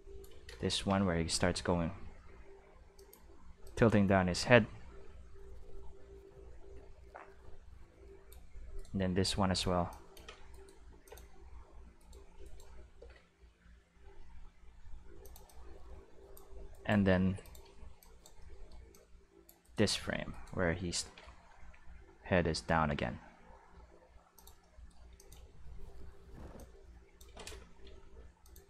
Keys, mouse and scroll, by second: 0.6 shift+d, 2.9 click, 3.6-8.2 drag, 8.7 right click, 9.2-10.9 drag, 10.5 right click, 10.9 x, 11.0 click, 11.9 right click, 12.4 right click, 12.9 shift+d, 15.2 click, 15.4-16.3 drag, 16.7 right click, 17.2 x, 17.4 click, 18.0 click, 18.9 click, 19.6 right click, 20.3 right click, 20.9 shift+d, 24.3 click, 25.1 click, 25.3 space, 26.5 space, 26.5-27.1 drag, 27.8 g, 28.4 click, 28.6 click.